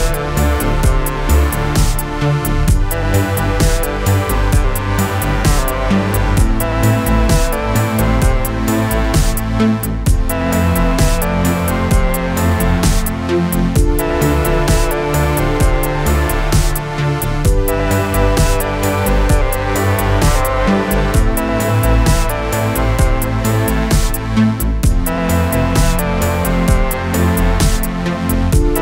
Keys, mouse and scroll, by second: 2.0 ctrl+d, 3.3-8.5 click, 10.1 click, 11.5-12.8 alt+click, 15.7 ctrl+d, 16.7-19.9 click, 21.2-22.0 alt+click.